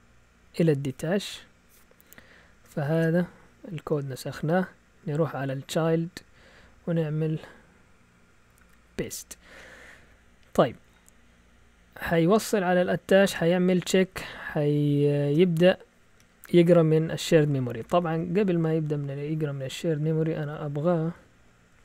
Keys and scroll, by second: 0.4 Up, 2.9 y, 3.3 Down, 3.9 Down, 4.0 Down, 4.1 Down, 4.2 Down, 4.3 Down, 4.4 Down, 5.2 Up, 8.6 p, 12.4-13.9 typing, 15.3 typing, 16.1-17.2 Right, 17.8 Up, 18.0-19.1 Up, 20.4 End, 21.7 typing.